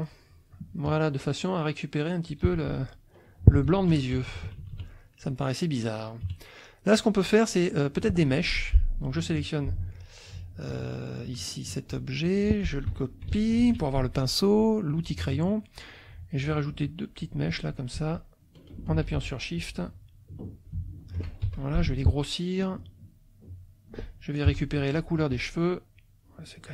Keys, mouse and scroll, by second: 0.8 click, 2.5 z, 2.6 click, 3.6 F1, 4.1 KP_Subtract, 6.2 KP_Subtract, 7.5 click, 8.3 F2, 8.5 click, 10.7 click, 12.9 F1, 13.5 ctrl+c, 14.6 click, 15.2 middle click, 16.9 click, 18.1 shift+click, 19.6 shift+click, 20.5 shift+click, 21.5 shift+F2, 22.8-24.0 drag, 24.5 F7, 24.9 click, 25.3 F1, 26.0 click.